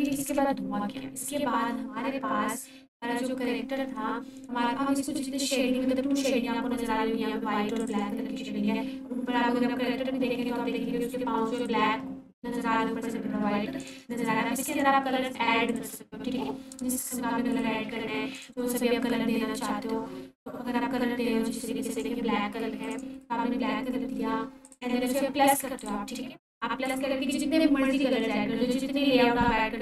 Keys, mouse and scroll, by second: 0.1 ctrl+space, 7.8 click, 11.9-14.1 ctrl+alt+drag, 17.8-18.5 click, 20.7-22.0 drag.